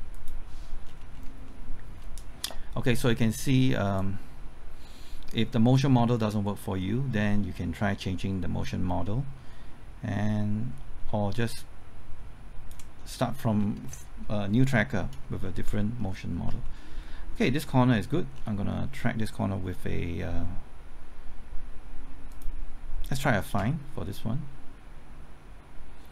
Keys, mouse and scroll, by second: 0.8-1.5 scroll down 1, 1.5 middle click, 4.0-13.0 drag, 13.0-13.6 scroll up 1, 13.6-14.7 scroll down 1, 14.9 scroll up 1, 15.5 shift+middle click, 16.1 scroll up 1, 16.6 shift+middle click, 17.1-18.3 scroll up 1, 18.3 scroll down 1, 18.7-19.8 scroll up 1, 22.3 click.